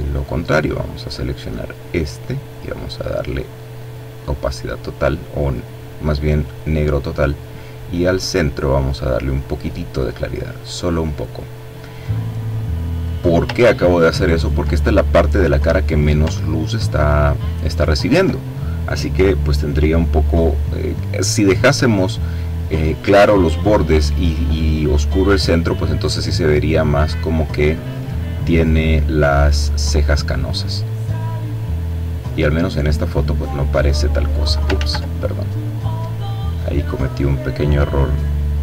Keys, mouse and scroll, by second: 2.1-3.1 drag, 4.0-5.6 drag, 6.2-8.9 drag, 10.1 click, 12.5 click, 13.2-14.0 ctrl+scroll down 2, 15.9-16.5 ctrl+scroll up 2, 16.7-17.3 ctrl+scroll up 2, 17.3-17.9 ctrl+scroll down 2, 19.2 click, 25.3-34.2 drag, 34.2 ctrl+z, 35.3-36.6 drag.